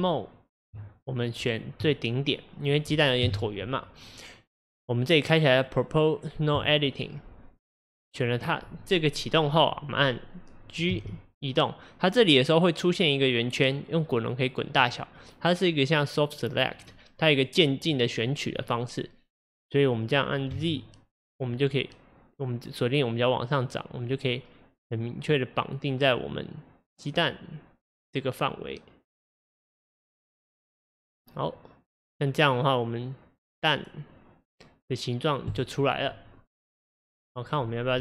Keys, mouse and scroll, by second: 1.5 click, 1.9-3.3 middle drag, 3.3 KP_1, 6.6 click, 11.0 g.